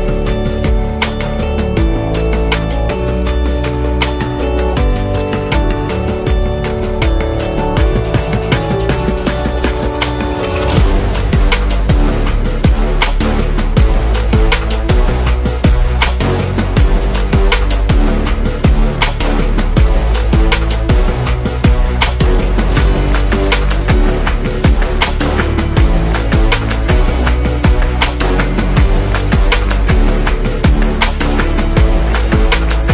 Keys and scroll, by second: 12.8 super+-, 12.9 super+-, 14.0 z, 14.7 v, 20.8-25.1 typing, 26.3 typing, 27.8 z, 29.1 v.